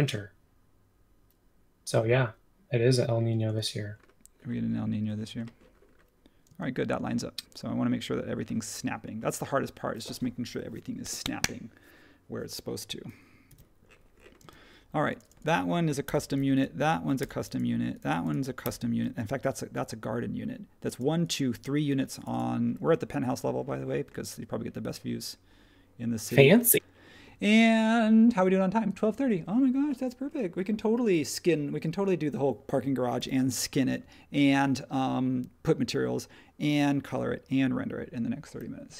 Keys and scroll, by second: 13.5 super+1, 14.4 space, 16.0 BackSpace, 17.2 BackSpace, 18.6 BackSpace, 33.1 h, 38.8 space.